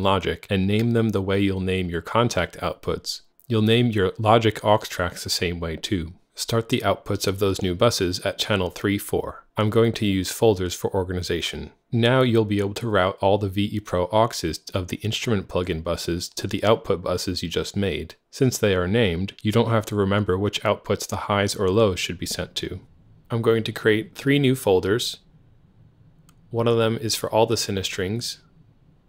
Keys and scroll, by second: 0.1-4.9 typing, 3.3 Tab, 5.0 Return, 26.3 super+d.